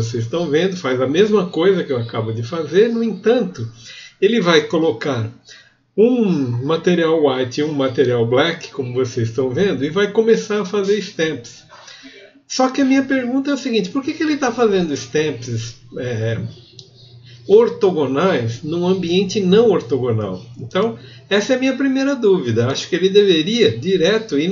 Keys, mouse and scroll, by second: 0.8 click, 1.1 t, 1.6 scroll down 2, 1.9 click, 2.3 click, 2.9 right click, 3.2 w, 3.7 Return, 8.5-11.0 drag.